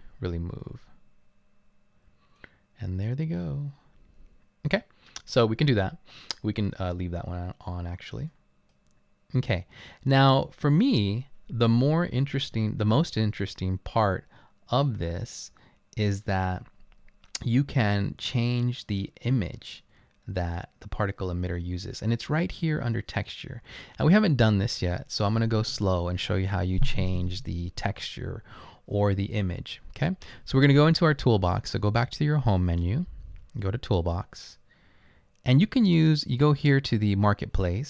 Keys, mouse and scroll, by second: 7.8 scroll up 2, 7.9 middle click, 8.3 right click, 9.3-10.2 middle drag, 9.3-10.0 scroll up 2, 10.0 scroll up 1.